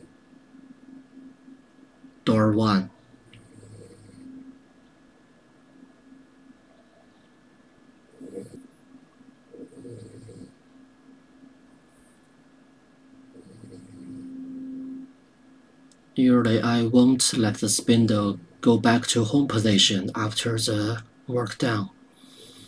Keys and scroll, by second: 3.8-5.9 typing, 8.4 Return.